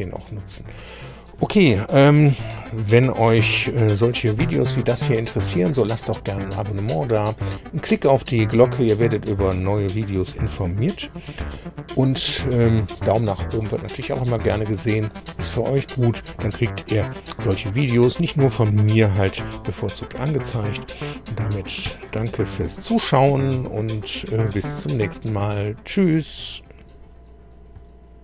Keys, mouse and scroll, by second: 4.4 super+2, 21.9 super+3.